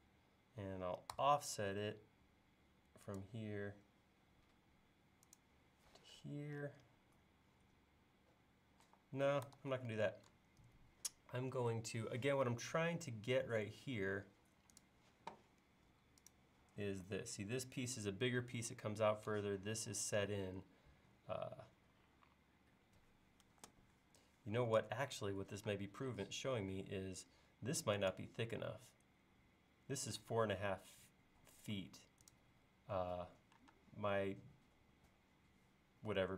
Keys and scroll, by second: 1.1 f, 8.9 e, 9.6 super+z, 24.8 super+Tab, 30.3 space, 31.8 l, 33.7 space.